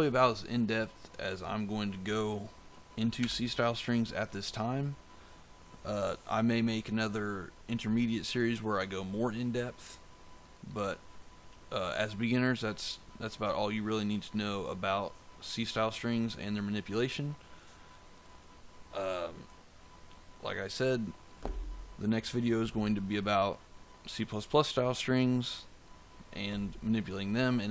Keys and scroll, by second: 3.1 BackSpace.